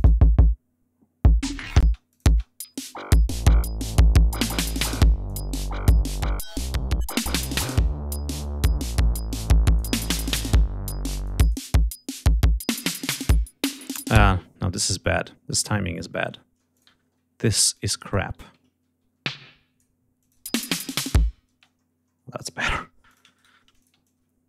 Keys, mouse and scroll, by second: 0.0 click, 1.3 click, 1.8 space, 2.0 click, 2.6 ctrl+scroll down 2, 4.8 click, 5.8-7.4 drag, 8.0 click, 8.8 click, 10.3 scroll up 1, 11.1 click, 13.0 scroll down 1, 14.1 ctrl+space, 14.3 ctrl+scroll up 2, 15.4 scroll down 2, 16.6 ctrl+click, 16.9 ctrl+scroll up 2, 17.3 ctrl+w, 17.6 ctrl+click, 18.6 ctrl+y, 18.9 ctrl+e, 19.1-19.9 ctrl+drag, 20.1 click, 20.3 space, 21.4 space, 22.0 ctrl+scroll down 2, 22.6 ctrl+g, 23.0 ctrl+shift+click, 23.3 ctrl+shift+right click, 23.7 ctrl+shift+click.